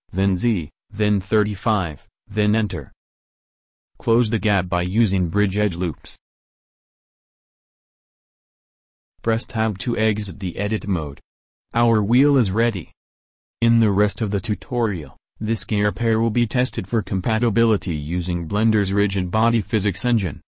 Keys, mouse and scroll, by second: 5.0 w, 9.6 Tab.